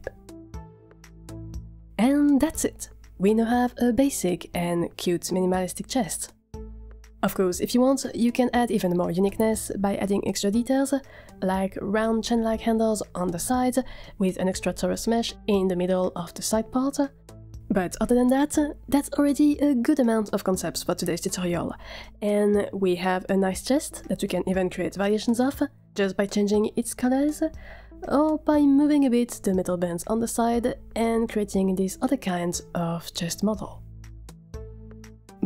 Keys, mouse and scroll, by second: 0.0 scroll down 1, 0.3 middle click, 1.1 Tab, 1.4 click, 2.2-9.3 middle drag, 11.5 middle click, 11.7-15.7 typing, 14.1 scroll up 2, 14.1 shift+middle click, 14.2 click, 14.3 click, 14.4 click, 15.8 Tab, 15.8 F3, 16.0 click, 17.7 click, 18.1 scroll down 2, 18.3-22.0 middle drag.